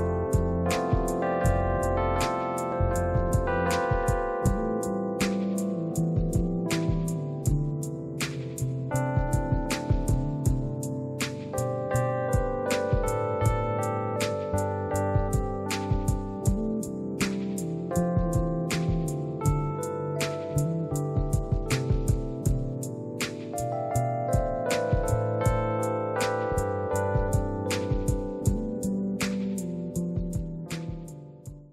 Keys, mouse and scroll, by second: 1.4 click, 6.2 space, 6.4 click, 6.9 click, 7.2 space, 7.6 click, 8.2 click, 8.2 space, 8.5 click, 9.0 click, 9.3 scroll down 2, 9.4 scroll up 2, 9.6 click, 9.6-10.1 scroll down 4, 9.8 click, 9.8 space, 10.4 scroll up 2, 10.8 click, 10.8 space, 11.0 click, 11.3 click, 11.6 click, 11.7 click, 12.6 click, 14.0 space, 14.1 click, 14.2 space, 14.5 click, 15.2 space, 15.6 click, 16.1 space, 16.2-18.2 scroll down 3.